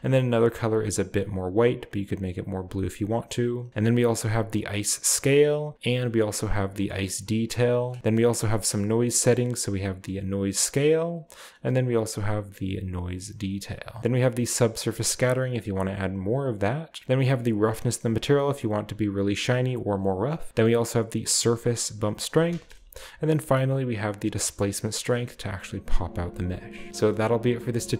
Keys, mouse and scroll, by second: 0.6-3.5 drag, 4.0-5.3 drag, 5.3 middle click, 5.5-8.3 middle drag, 7.9-9.1 scroll up 1, 9.1-14.0 middle drag, 9.1 scroll up 1, 17.0 middle click, 20.0 middle click, 22.3 middle click, 26.2 shift+middle click, 26.5-26.8 shift+scroll down 1, 27.4 click.